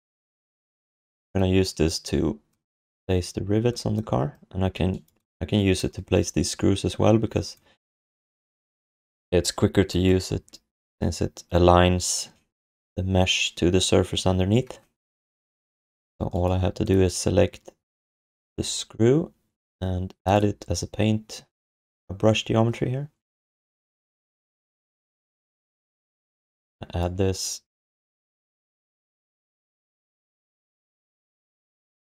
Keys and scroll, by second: 27.1 1, 28.5 3, 30.2 1.